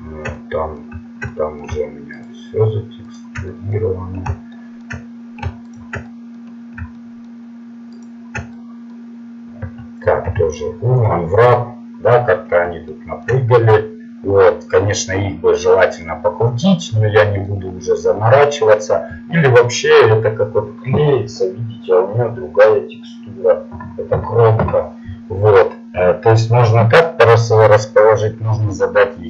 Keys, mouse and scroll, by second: 3.5-4.7 middle drag, 10.2 u, 15.5-18.8 middle drag, 26.7-29.2 middle drag.